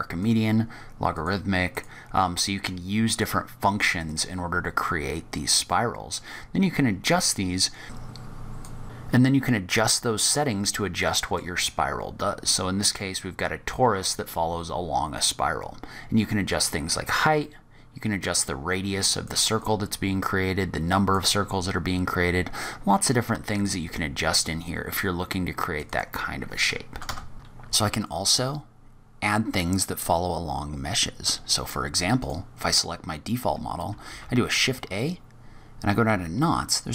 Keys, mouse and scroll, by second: 1.0 click, 3.1 click, 4.8-5.6 scroll up 7, 5.6 middle click, 7.8 scroll down 3, 7.8 scroll up 1, 8.1 click, 10.6-11.0 scroll down 5, 11.0 middle click, 11.8-12.4 scroll up 2, 17.1 click, 19.4 click, 22.5 click, 25.8 click, 27.3 shift+middle click, 27.3 click, 27.3 scroll up 2, 27.8 click, 28.4 scroll up 1, 32.1 click, 34.1 shift+a.